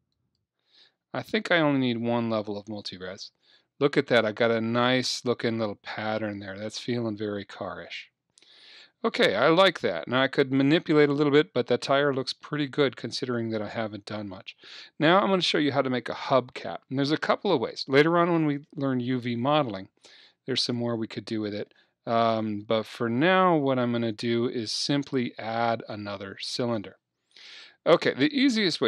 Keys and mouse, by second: 0.2-2.1 drag, 2.1-3.7 middle drag, 4.3-6.1 middle drag, 12.5-16.6 middle drag, 20.6-23.0 drag, 23.0 middle click.